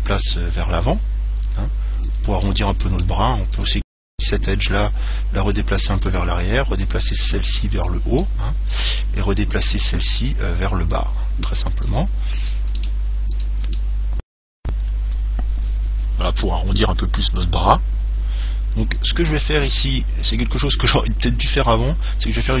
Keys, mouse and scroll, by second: 0.3 scroll down 1, 0.5 click, 2.7-4.4 middle drag, 3.8 right click, 4.8 click, 6.3 right click, 7.1 click, 8.4-10.3 middle drag, 8.9 click, 9.9 right click, 10.9 click, 12.6 right click, 13.0 middle click, 13.1-14.3 drag, 14.3-15.9 middle drag, 14.3 right click, 19.6 Tab, 20.5-22.6 middle drag.